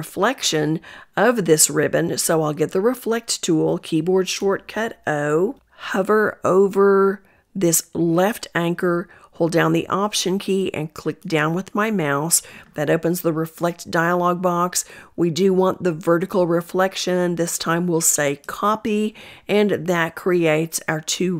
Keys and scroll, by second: 2.6 o.